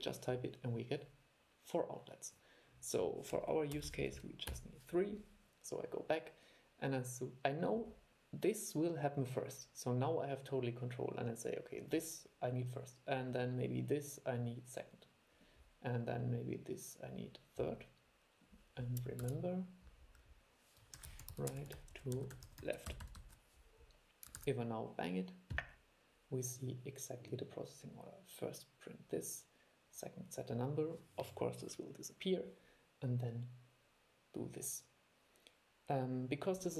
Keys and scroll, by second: 19.4 super+5, 24.6 super+e.